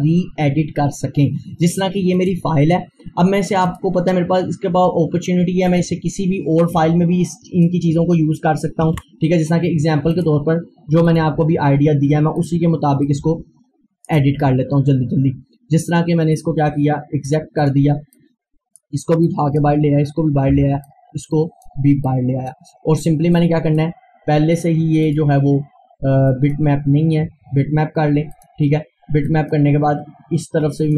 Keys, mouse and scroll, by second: 2.1 F4, 2.2 click, 4.3 scroll down 1, 5.7-8.9 drag, 8.9 ctrl+z, 9.5 scroll down 1, 10.2 click, 14.1 shift+right click, 14.4 scroll down 1, 15.3 scroll up 1, 15.7 scroll, 17.3-20.5 drag, 20.5 Delete, 20.8-22.8 drag, 22.8 scroll down 1, 23.4-25.1 drag, 27.5-28.3 scroll up 1, 28.3 click, 29.3-30.9 drag.